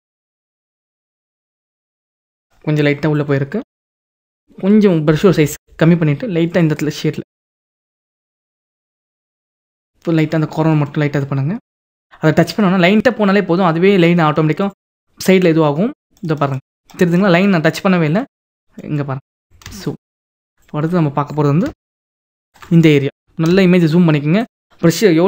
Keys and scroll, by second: 3.3 [, 23.2 ctrl+-, 25.0 [.